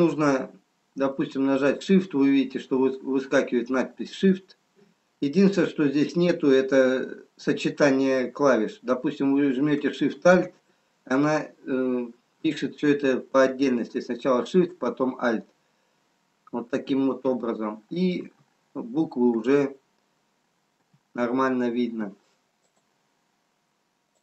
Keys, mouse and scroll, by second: 18.8 r, 19.9 e, 21.5 g.